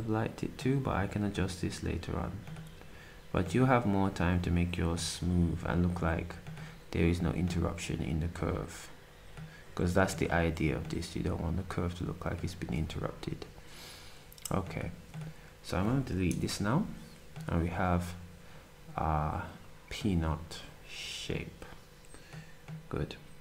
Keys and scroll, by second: 12.5 s, 16.3 Delete.